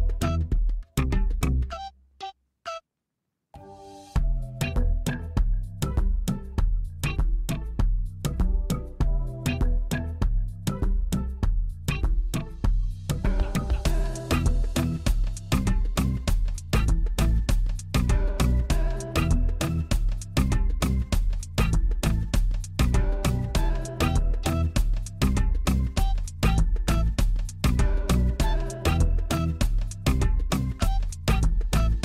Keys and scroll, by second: 1.6 x, 3.4 g, 4.0 x, 5.9 g, 6.0 y, 7.4-9.0 typing, 11.0 alt+a, 16.0 g, 16.4 y, 17.5 shift+z, 21.2 b, 23.3 g, 23.4 y, 24.0 shift+z.